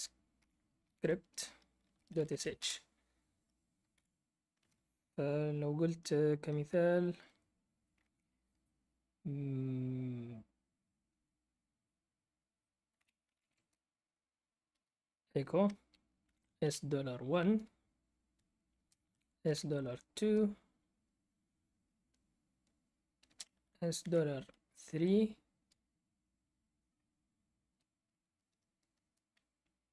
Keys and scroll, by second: 0.0-2.8 typing, 3.9 F8, 6.1 typing, 12.7-13.9 typing, 15.9-16.7 typing, 18.4-19.9 typing, 23.3-25.0 typing.